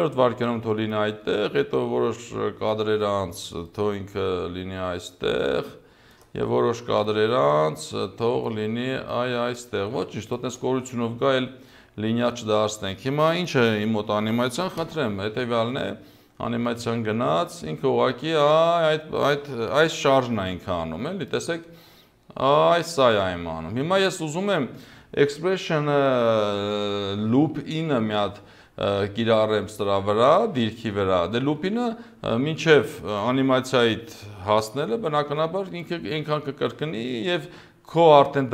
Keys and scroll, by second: 14.8 0, 19.7 0.